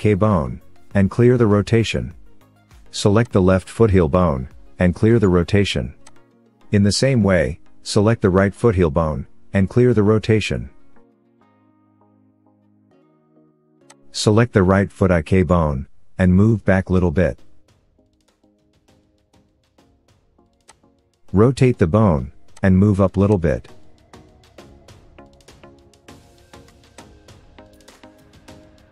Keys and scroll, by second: 4.3 alt+r, 9.1 alt+r, 11.0 KP_3, 14.6 KP_3, 16.2 KP_3, 19.0 g, 21.4 r, 24.4 g.